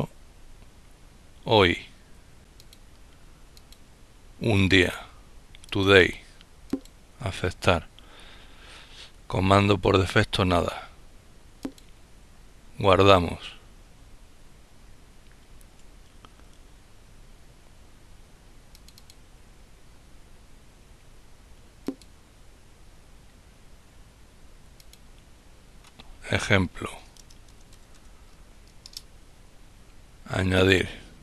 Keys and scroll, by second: 25.4-27.0 typing, 27.5 Return.